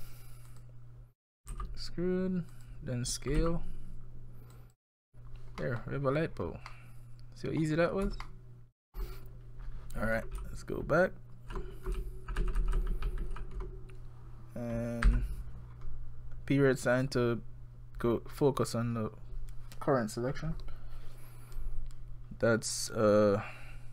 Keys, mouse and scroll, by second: 1.5 e, 3.4 s, 5.6 middle click, 5.8 scroll down 1, 5.9 scroll up 2, 6.0-7.2 scroll down 9, 6.7 middle click, 7.6-8.1 scroll up 7, 8.2 shift+middle click, 10.4-11.6 ctrl+z, 12.0 ctrl+z, 12.4 ctrl+z, 12.6-13.0 ctrl+z, 13.2 ctrl+z, 13.4 ctrl+z, 15.1 KP_Decimal, 15.7 scroll down 5, 17.0 click.